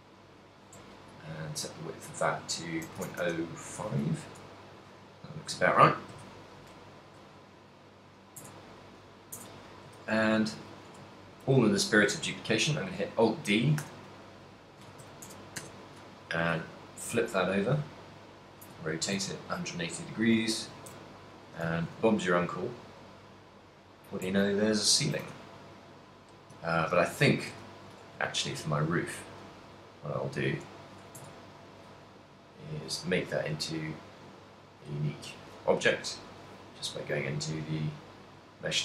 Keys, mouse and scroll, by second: 1.6 click, 4.4 middle click, 4.9 a, 6.2 KP_3, 7.4 right click, 8.6 Tab, 9.6 Tab, 10.3 shift+s, 11.6 alt+d, 13.7 right click, 13.9 r, 16.4 g, 18.8 ctrl+click, 19.2 shift+middle click, 19.4 ctrl+middle click, 20.0 ctrl+middle click, 20.1 shift+middle click, 20.8 g, 21.6 shift+click, 22.1 g, 24.2 click, 24.6 ctrl+middle click, 25.4 a, 25.6 middle click, 26.8 middle click, 27.6 KP_3, 28.1 Tab, 28.6 shift+middle click, 30.1 ;, 31.4 Tab, 32.5 right click, 33.7 click, 35.0 click.